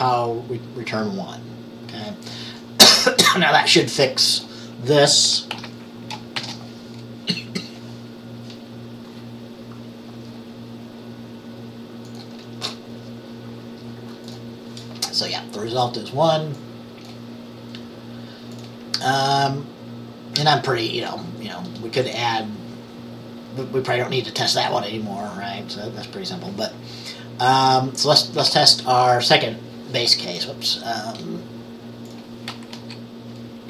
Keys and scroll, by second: 5.6 ctrl+s, 6.5 ctrl+b, 28.6 ctrl+a, 32.8 Right.